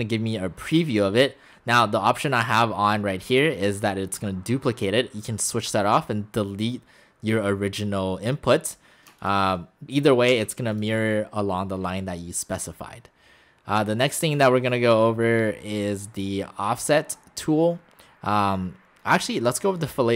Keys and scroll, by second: 10.3 shift+x.